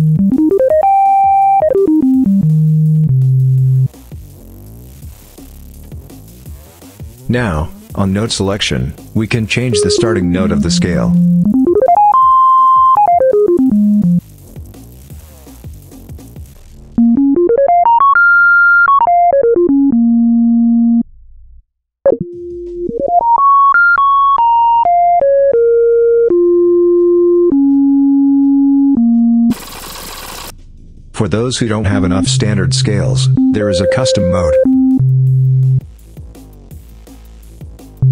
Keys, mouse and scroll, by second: 8.4 click, 9.5-14.2 drag, 15.8 click, 16.7-21.0 drag, 21.8-29.5 drag, 30.1 click, 30.6 click, 31.7-35.7 drag, 36.7 click, 37.8-38.1 drag.